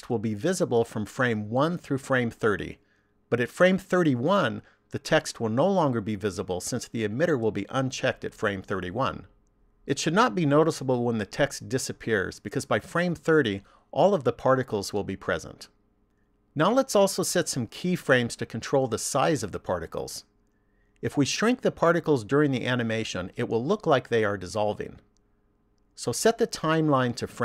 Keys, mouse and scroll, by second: 26.5 click.